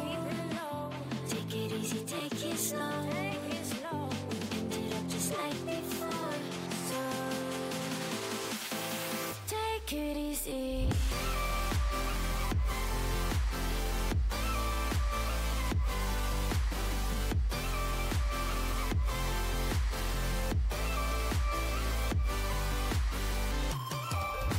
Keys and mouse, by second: 0.5 e, 3.6-7.9 drag, 4.5 f, 6.2 e, 12.2-13.9 drag, 12.2 f, 13.9 ctrl+z, 14.2-16.3 drag, 15.5 g, 21.5 right click, 21.6 f.